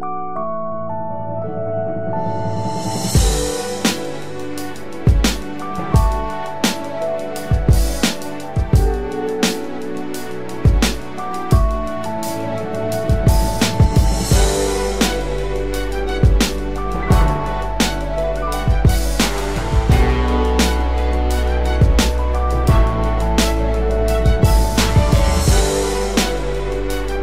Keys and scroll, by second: 8.4 ctrl+j.